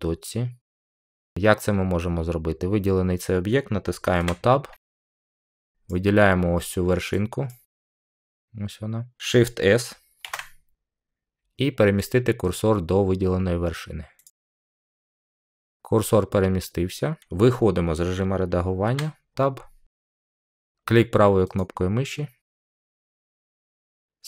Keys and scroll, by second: 4.1 Tab, 10.1 s, 18.8 Tab.